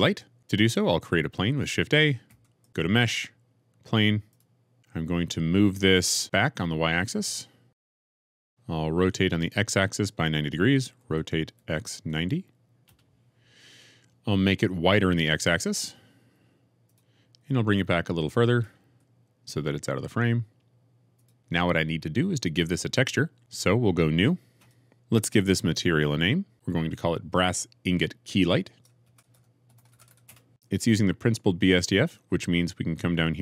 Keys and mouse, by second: 2.2 shift+a, 5.7 g, 7.1 y, 8.5 ctrl+shift+z, 8.5 KP_0, 10.9 r, 11.5 x, 11.8 KP_9, 12.0 KP_0, 12.8 KP_Enter, 14.3 s, 15.7 x, 18.4 g, 19.0 y, 21.1 click, 22.1-24.5 middle drag, 24.6-26.5 middle drag, 29.3 s, 30.5-33.4 middle drag.